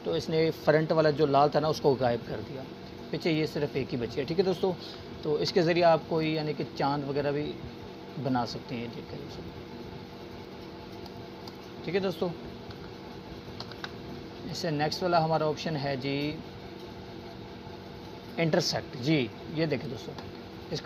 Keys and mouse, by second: 0.0 click, 4.0 click, 5.6 ctrl+z, 7.1-10.5 drag, 13.5 ctrl+z, 15.3-16.6 drag, 20.6-20.8 drag.